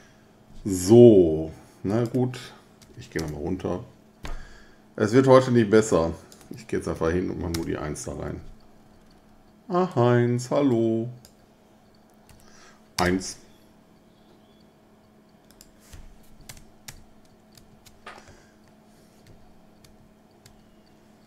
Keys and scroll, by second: 2.8 BackSpace, 3.2 Return, 6.9 1, 7.5 Return, 12.3 1, 13.0 Return, 16.5 BackSpace, 16.9 BackSpace, 17.6 BackSpace, 19.3 BackSpace, 19.8 BackSpace, 20.5 BackSpace.